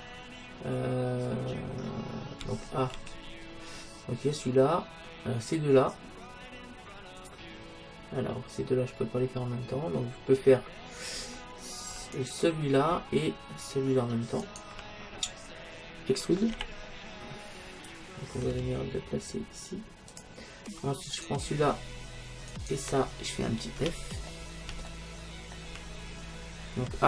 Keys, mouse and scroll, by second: 2.4 a, 3.0 a, 12.2-14.0 right drag, 14.4-16.3 right drag, 15.4-19.7 middle drag, 16.5 e, 20.2-22.0 drag, 21.1-24.3 right drag, 23.8 f, 24.3-26.9 middle drag.